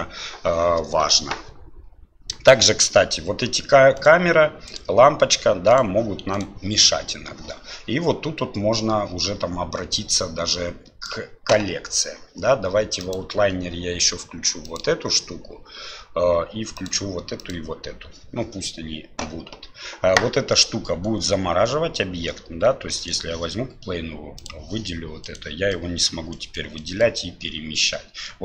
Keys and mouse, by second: 10.1-11.2 right drag, 13.1-24.4 right drag, 24.4 click, 25.8 right drag, 26.4 right click, 26.8-28.4 right drag.